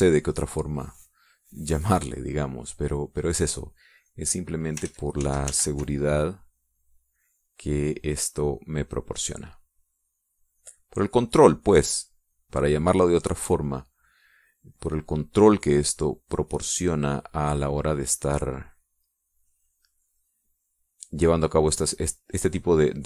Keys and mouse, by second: 4.6 click, 5.5 ctrl+z, 6.8-13.6 ctrl+drag, 15.4 middle click, 15.7 click, 17.7-23.0 drag.